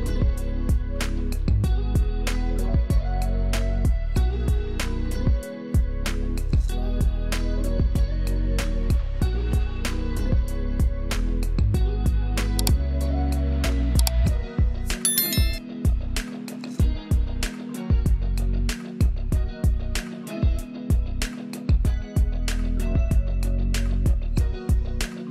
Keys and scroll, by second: 0.3 space, 5.9 space, 8.4 shift+space, 11.8 F11, 12.4 space, 13.2 alt+space, 14.7 space, 21.2 space, 22.2 space, 23.3 alt+space.